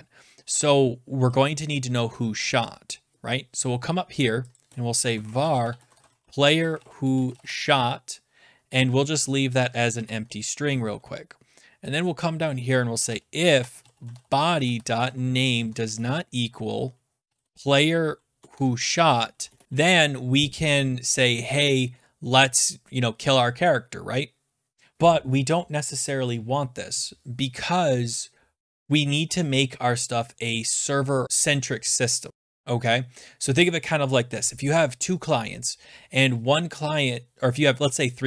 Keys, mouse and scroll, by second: 3.9 scroll down 1, 4.6 click, 4.8-11.2 typing, 5.3 scroll, 5.7 middle click, 5.8 scroll, 11.2 scroll, 11.9 click, 12.7-20.1 typing, 18.5 Tab.